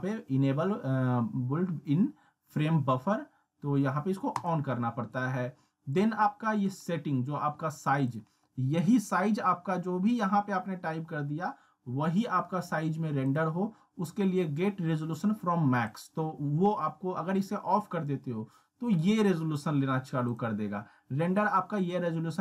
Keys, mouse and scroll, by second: 4.4 click, 8.1 click, 13.3 click, 15.9 click, 20.3 click.